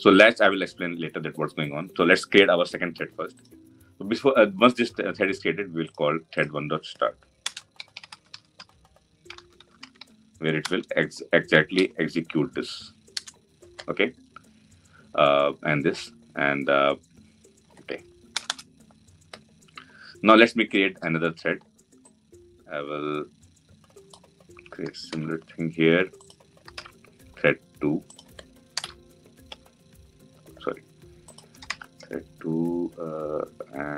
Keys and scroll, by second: 10.4 Return, 24.8 ctrl+c, 27.4 ctrl+v.